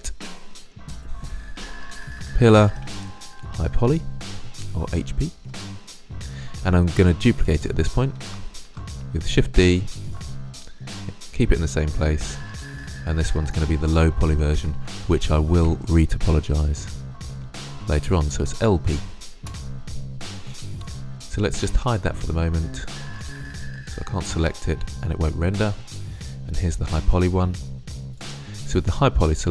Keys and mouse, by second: 1.2 middle click, 2.1 l, 5.7-7.9 middle drag, 7.9 shift+d, 8.6 shift+d, 11.2-11.6 middle drag, 12.4-14.5 drag, 14.7 BackSpace, 15.0 BackSpace, 15.2 BackSpace, 21.6-29.0 drag, 29.0-29.5 middle drag.